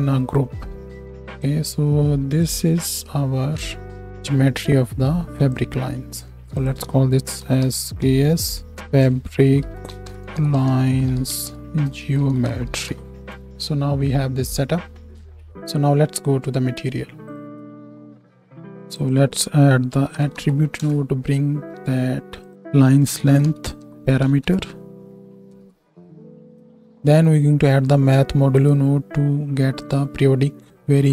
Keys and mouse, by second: 1.0 ctrl+g, 1.0 Tab, 1.4-3.7 middle drag, 8.5-17.4 middle drag, 15.5 ctrl+s, 17.4-18.7 drag, 17.4 z, 18.5 shift+a, 20.2 t, 22.5-29.9 middle drag.